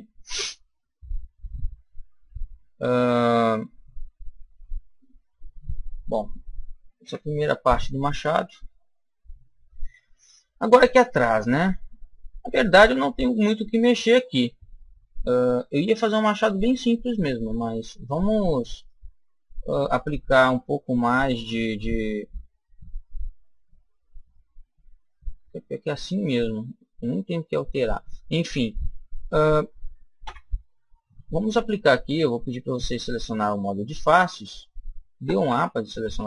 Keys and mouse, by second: 1.0-3.0 middle drag, 6.9 KP_1, 8.0-10.4 middle drag, 10.8-12.7 middle drag, 14.6-16.4 middle drag, 16.5-19.1 middle drag, 18.6-20.5 right drag, 20.5-22.4 middle drag, 30.1 KP_1, 32.6-33.6 drag, 33.5 right click, 33.6 middle click, 34.4 right click, 35.2 a, 35.4 a, 36.0 a.